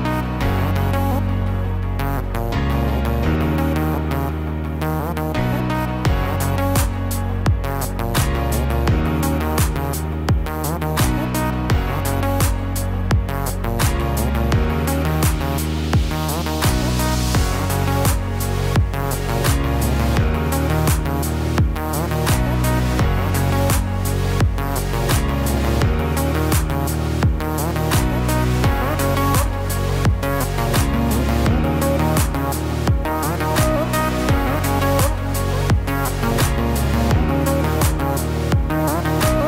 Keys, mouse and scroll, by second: 1.7 KP_1, 2.9 e, 9.2 middle click, 12.2-15.3 click, 15.1 click, 16.3 e, 20.3 shift+click, 21.2 shift+click, 21.8 f, 23.7 ctrl+z, 24.6 middle click, 28.6 right click, 33.8 middle click, 38.0 KP_3, 39.2 KP_1.